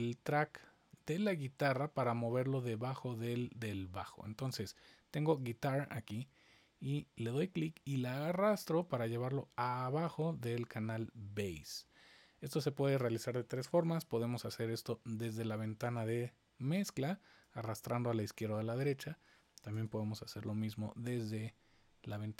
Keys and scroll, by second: 13.6 super+=, 19.7 super+=.